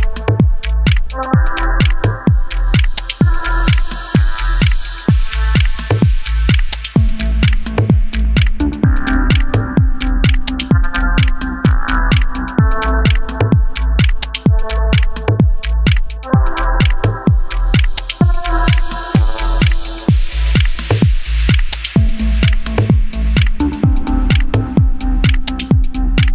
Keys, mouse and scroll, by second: 0.0-2.2 typing, 1.2 click, 2.0 click, 2.5-3.0 shift+middle drag, 3.2 g, 3.4 click, 3.6 KP_3, 3.7 g, 3.9 click, 4.2 shift+middle click, 4.5 scroll up 2, 4.8 click, 5.0-13.8 typing, 5.2 click, 5.5 shift+middle drag, 5.6 click, 5.9 click, 6.5 shift+middle click, 6.6 click, 7.2 click, 7.6 scroll down 2, 7.7 shift+middle click, 7.8 Tab, 7.9 Tab, 8.0 shift+middle click, 8.3 click, 9.2 shift+middle click, 10.1 middle drag, 10.4 alt+click, 10.7 shift+middle click, 11.5 scroll up 2, 11.7 click, 11.9 click, 12.1 click, 12.4 click, 13.7 click, 14.3 Tab, 14.4 scroll down 6, 14.5 shift+middle click, 14.8-15.5 shift+middle drag, 15.5-19.1 typing, 15.6 Tab, 15.6 shift+middle click, 15.8 scroll up 3, 16.3 shift+middle click, 16.3 scroll up 1, 16.5 click, 17.2 click, 17.5 click, 17.6 shift+middle click, 18.0 click, 18.3 click, 18.4 shift+middle click, 18.6 click, 18.9 click, 19.5 click, 19.8-20.1 shift+middle drag, 20.3 click, 20.3 g, 20.5-20.9 middle drag, 21.0 shift+click, 21.3 shift+click, 21.4-25.6 typing, 21.9 click, 22.1 click, 22.4 shift+click, 22.8 Tab, 22.9 scroll down 7, 23.0 shift+middle click, 23.2 scroll up 3, 23.6 alt+click, 25.1 alt+click, 25.5 click, 25.9 Tab, 26.0 Tab, 26.1 click.